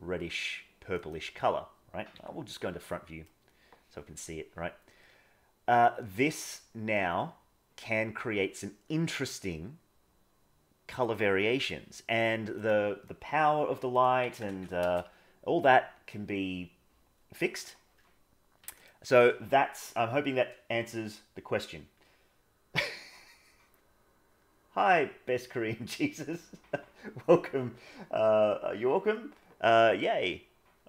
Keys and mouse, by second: 2.1 KP_1, 2.8 middle click, 4.0 g, 11.4 g, 13.9 click, 14.5 KP_0, 18.7 shift+click.